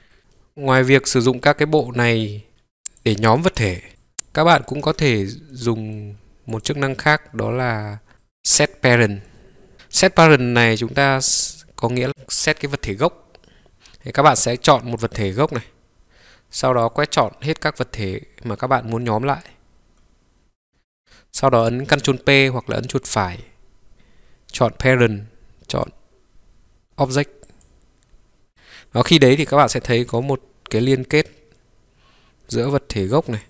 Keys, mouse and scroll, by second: 0.0 ctrl+click, 0.2 Delete, 0.2 scroll down 1, 0.4-1.5 middle drag, 1.5-1.9 drag, 2.5 middle click, 2.5 g, 3.0-3.7 drag, 4.0-4.9 drag, 4.9 g, 5.6-6.6 middle drag, 6.6 click, 7.0 scroll up 1, 7.1 scroll down 1, 7.2-7.5 scroll up 1, 7.6 scroll down 1, 8.1-9.2 drag, 9.7 click, 10.7-12.1 middle drag, 15.0 click, 16.9-19.4 drag, 22.9-27.6 right drag.